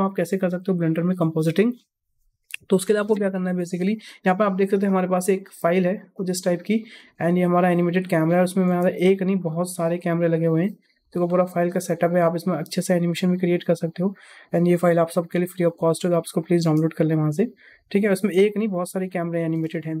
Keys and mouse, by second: 5.3-8.1 drag, 8.6 KP_0, 9.4-9.7 middle drag, 11.3-11.6 middle drag, 12.4 shift+middle drag, 13.2 click, 13.6-14.7 middle drag, 15.4 shift+middle drag, 15.8-16.3 middle drag, 16.5 space, 18.1 space, 18.4-18.9 middle drag, 19.2 shift+middle click, 19.5 space.